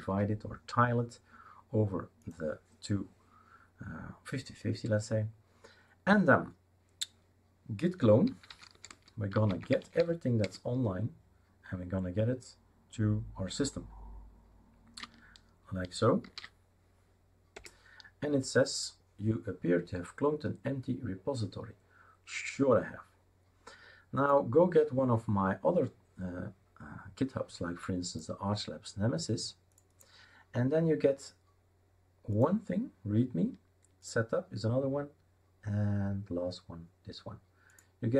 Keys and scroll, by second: 0.1 super+6, 8.0-10.5 typing, 16.2 ctrl+shift+v, 17.5 Return.